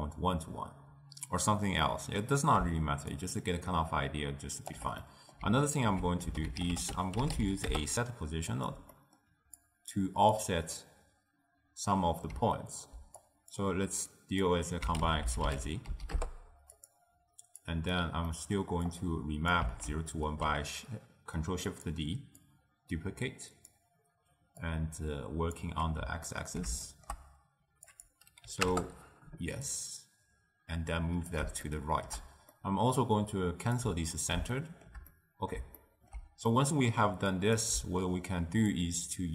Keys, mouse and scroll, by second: 1.9 middle click, 3.3-5.1 shift+drag, 5.1 middle click, 5.9 ctrl+a, 9.0-9.7 middle drag, 9.7 click, 10.5 click, 13.3 click, 14.2-16.9 drag, 17.7 click, 18.4 middle click, 19.0 click, 20.0 ctrl+shift+d, 22.5-24.9 drag, 26.4-28.0 ctrl+middle drag, 28.0-31.8 drag, 31.8-33.8 shift+middle drag, 33.8 click, 34.6-37.4 shift+middle drag, 37.4 click, 38.8-39.3 shift+drag.